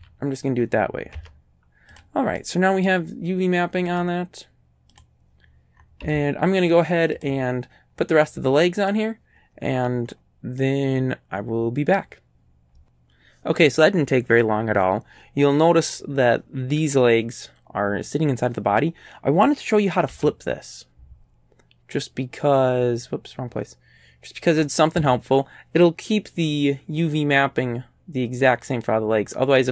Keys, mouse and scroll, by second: 0.0 a, 1.2 Tab, 2.0 click, 2.4 middle click, 3.9 click, 5.0 click, 5.7 scroll down 2, 6.0 z, 7.2 click, 10.1 middle click, 10.6-12.2 right drag, 20.1 w.